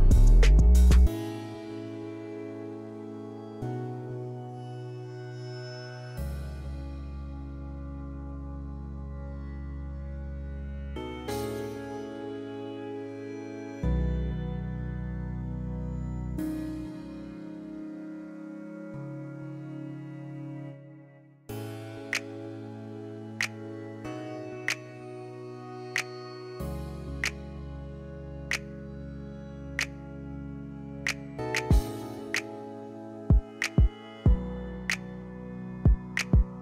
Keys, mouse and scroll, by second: 3.7 click, 6.9 middle click, 7.7 click, 8.7 drag, 9.3 click, 11.0-11.4 scroll up 2, 13.1 click, 13.8 click, 14.5 KP_0, 14.7 KP_3, 14.9 Return, 16.4 click, 16.9 KP_0, 17.2 KP_1, 17.4 Return, 18.7 middle click, 19.7 click, 20.2 KP_0, 20.5 KP_2, 20.7 Return, 22.1-22.5 middle drag, 22.7-23.7 scroll up 1, 24.7 Escape, 25.5 click, 26.0 middle click, 30.1 middle click, 30.8 middle click, 32.1 middle click, 33.0 click, 34.1-34.7 scroll down 1, 35.1 click, 36.0 click.